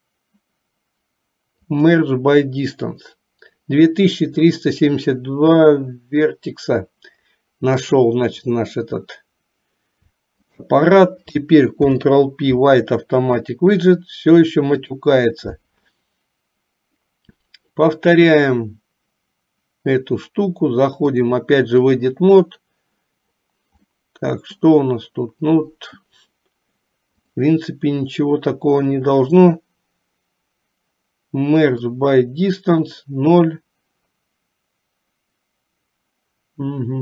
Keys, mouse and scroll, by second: 7.8 click, 11.9 ctrl+p, 21.1-22.3 drag, 24.2 middle click, 27.3-32.1 drag.